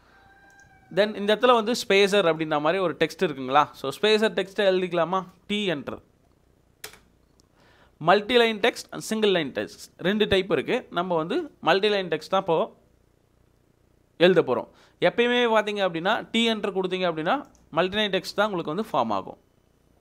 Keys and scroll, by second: 5.5 t, 6.9 space.